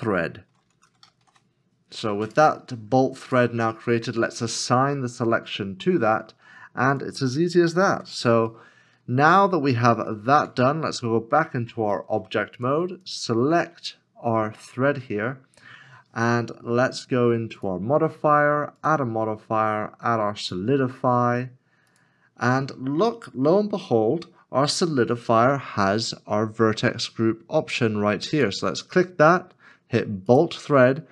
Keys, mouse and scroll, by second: 0.0-1.0 typing, 2.2 d, 7.9 /, 8.5 middle click, 9.1 scroll down 1, 9.8 middle click, 10.1 scroll down 1, 11.0 scroll, 11.2-11.7 scroll up 1, 12.0 shift+middle click.